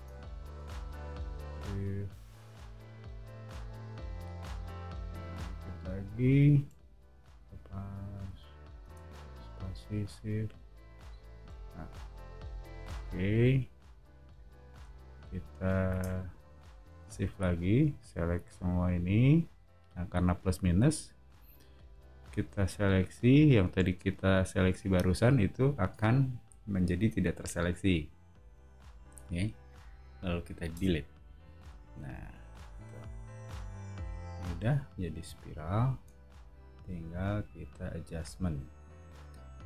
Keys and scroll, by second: 7.0 o, 8.8 space, 12.9 o, 15.9 space, 30.7 BackSpace, 32.1 o.